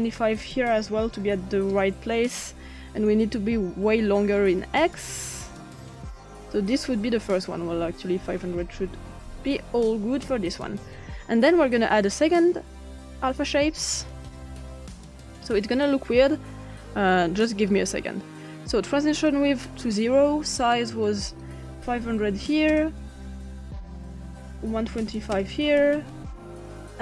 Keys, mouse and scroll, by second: 0.0 click, 0.9-1.3 typing, 1.7 Return, 4.2 click, 5.3 click, 8.0 click, 8.9-9.2 typing, 10.2 Return, 12.3 click, 13.4-14.6 drag, 15.2 click, 19.0-19.3 drag, 21.4 click, 22.2 typing, 22.7 Return, 23.8 click, 24.4-25.8 typing.